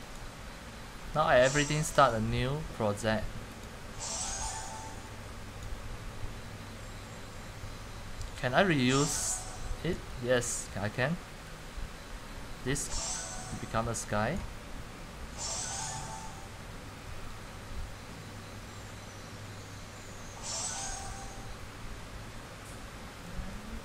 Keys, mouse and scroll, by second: 0.4-9.3 drag, 9.3-10.0 c, 10.1 x, 10.7-19.6 drag.